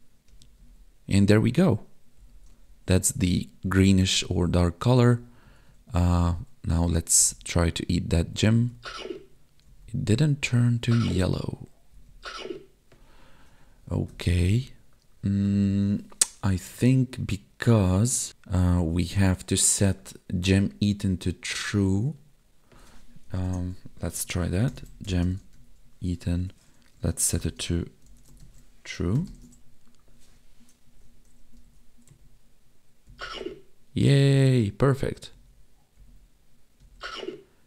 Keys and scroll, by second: 0.2 Left, 0.5 Down, 1.3 Right, 2.1 Up, 2.4 Left, 2.9 Down, 3.1 Right, 3.6 Up, 3.9 Right, 4.1 Up, 4.9 Right, 5.4 Down, 5.9 Left, 7.1 Down, 7.2 Right, 8.2 Up, 8.7 Left, 9.6 Down, 10.8 Right, 11.9 Up, 12.1 Left, 26.4 Tab, 26.9 space, 27.4 space, 29.4 ctrl+s, 29.6 Tab, 31.5 Up, 32.1 Right, 33.0 Down, 33.2 Left, 34.3 Down, 35.3 Right, 35.9 Up, 36.8 Left.